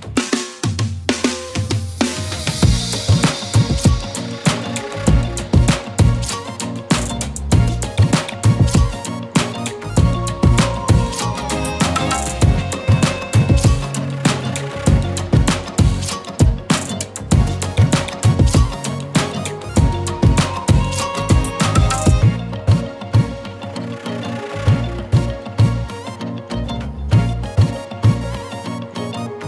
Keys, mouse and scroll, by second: 1.4 shift+click, 5.1 shift+click, 12.0 click, 17.0 Up, 18.7 click, 19.1 Down, 23.6 click, 23.9 Up, 26.7 scroll down 1, 27.2 z, 27.6 click, 27.7 space, 28.0 click, 29.3 click.